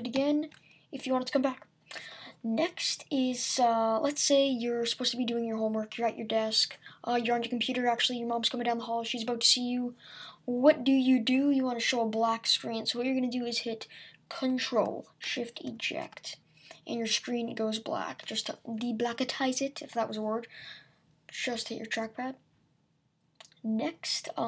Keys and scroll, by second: 0.2 alt+super+d.